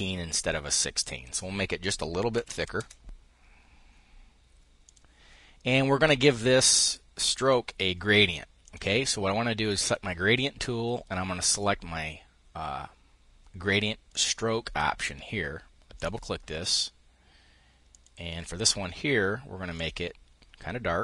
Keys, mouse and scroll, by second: 1.7-2.6 typing, 4.4 click, 8.2 click, 13.7 click, 15.5 click, 17.5 click, 19.3 click.